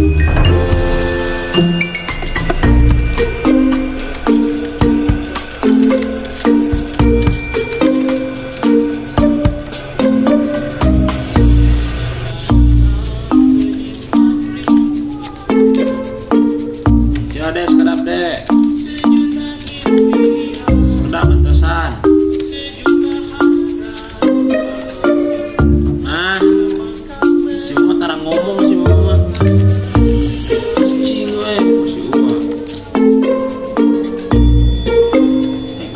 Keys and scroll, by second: 8.0 ctrl+a, 9.4-11.2 typing, 12.9 typing, 13.6 Escape, 14.5-15.3 typing, 19.7 t, 20.8 ctrl+a, 22.2-22.8 typing, 25.2-26.4 typing, 28.4 ctrl+z, 29.2 t, 31.4 Left, 34.5 shift+5.